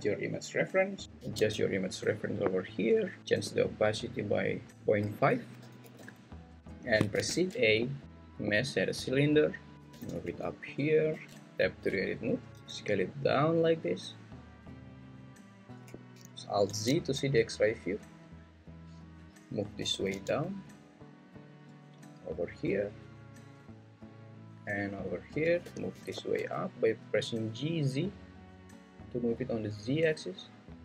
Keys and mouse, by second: 1.0 g, 1.2 z, 3.8 click, 5.1 click, 7.1 shift+a, 9.7 g, 9.9 z, 11.1 click, 11.3 Tab, 12.5 s, 15.5 click, 16.7 alt+z, 18.5 click, 19.8 g, 20.1 z, 24.5 click, 25.6 g, 26.0 z.